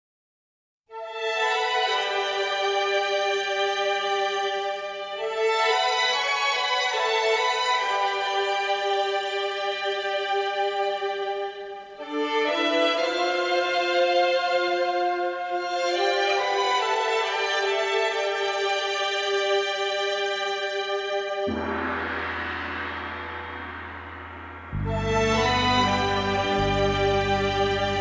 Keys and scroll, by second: 0.2 ctrl+z, 3.7 ctrl+z.